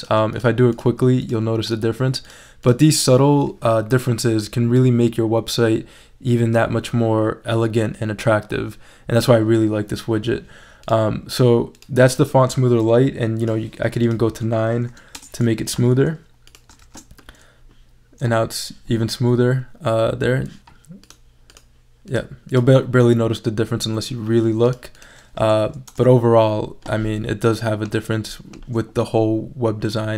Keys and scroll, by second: 14.9 9, 15.1 Return, 16.8 shift+super+e, 25.9 BackSpace.